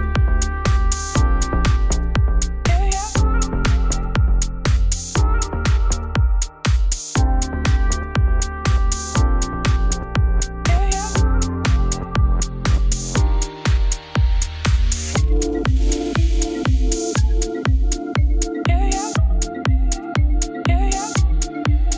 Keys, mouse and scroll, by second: 0.2-1.0 scroll down 1, 1.0 click, 1.1 g, 2.7 scroll down 2, 3.0 shift+middle click, 3.5-4.5 scroll up 1, 6.0 z, 6.4 click, 7.9-9.1 drag, 9.1 l, 9.5-10.5 scroll up 1, 10.9 click, 14.9 Tab, 15.0 3, 15.1 click, 15.6 click, 16.2 Tab, 17.4 click, 19.1 o, 20.0 ctrl+s.